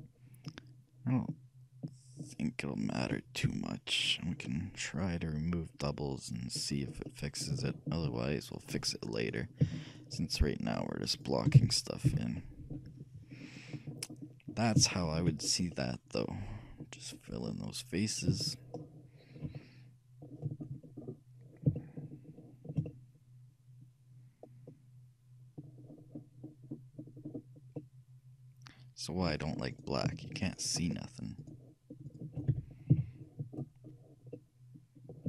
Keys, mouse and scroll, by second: 2.4-4.5 right drag, 3.5 f, 4.5-6.2 middle drag, 6.9-9.4 middle drag, 9.4 shift+click, 9.4-12.5 shift+right drag, 11.7 f, 12.2 a, 12.5-24.7 middle drag, 26.0-27.5 middle drag, 27.9-29.6 middle drag, 30.1-34.1 shift+right drag, 32.6 f, 33.1 a, 33.3-35.2 middle drag.